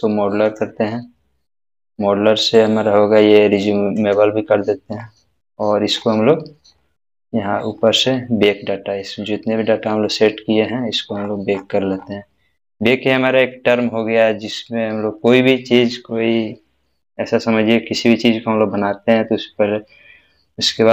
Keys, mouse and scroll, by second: 1.8-4.0 scroll down 1, 4.0 click, 5.0 scroll up 1, 9.6-10.1 scroll down 1, 10.1-10.5 scroll down 1, 11.2-13.8 scroll up 1, 13.8 scroll up 1, 15.0 scroll up 1.